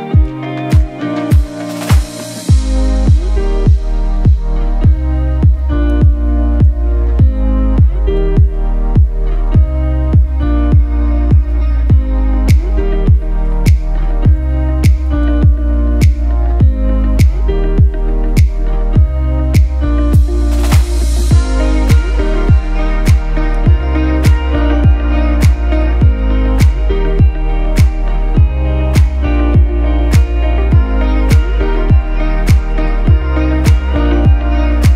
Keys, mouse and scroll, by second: 1.5 click, 11.3 scroll down 1, 15.0-18.2 drag, 18.2 right click, 19.0 click, 19.6-21.2 typing, 20.1 click, 20.5 click, 21.0 click, 21.3 click, 25.9 right click, 26.4-34.9 drag.